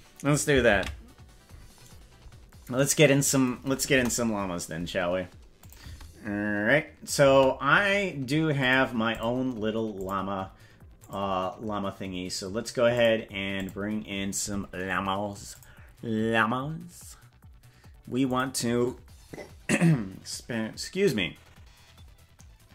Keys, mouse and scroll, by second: 3.9 KP_0, 5.6 click, 5.9 space, 7.3 space, 8.6 click, 9.1 click, 9.9 click, 11.0 click, 12.9 click, 13.5 click, 15.5-18.4 drag.